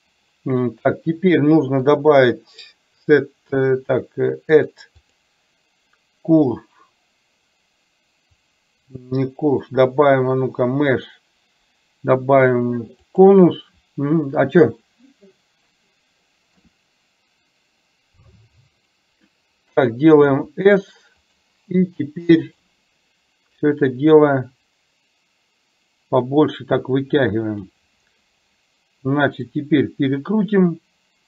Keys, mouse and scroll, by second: 1.9-4.7 drag, 5.1-13.4 drag, 16.6 r, 20.5 s, 22.6 click, 23.6-27.7 drag, 29.6-31.2 drag.